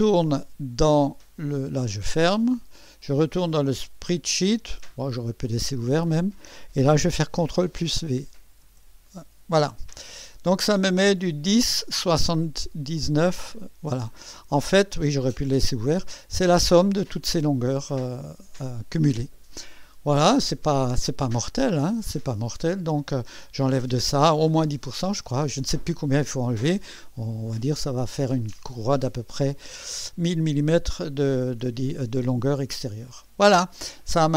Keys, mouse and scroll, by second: 2.5 click, 4.0 click, 7.5 ctrl+v, 7.5 ctrl+v, 8.0 ctrl+click, 8.6 ctrl+v, 8.6 ctrl+v, 10.2 click, 33.7 click.